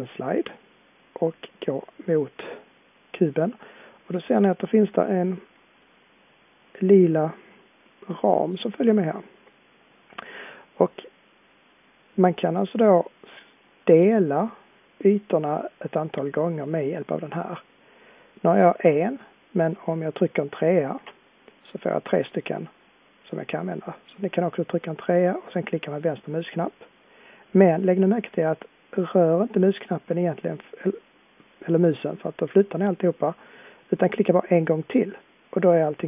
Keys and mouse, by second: 0.3-2.2 drag.